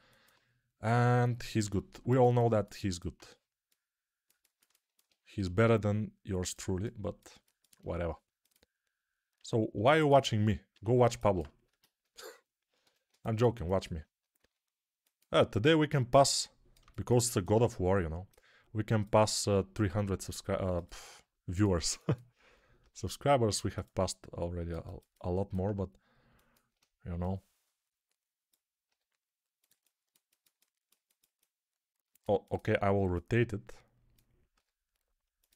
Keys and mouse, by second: 1.5 g, 4.2-6.4 ctrl+alt+drag, 5.2 g, 6.4-8.3 alt+middle drag, 8.3 click, 9.2-18.5 middle drag, 9.2 s, 10.6 s, 12.7 a, 14.3 s, 15.5 g, 18.5-20.7 drag, 19.2 g, 20.7-28.7 alt+middle drag, 22.7 g, 28.7 click, 28.7 g, 29.6-34.4 alt+middle drag, 34.4 right click, 34.4 g, 35.4-35.5 alt+middle drag.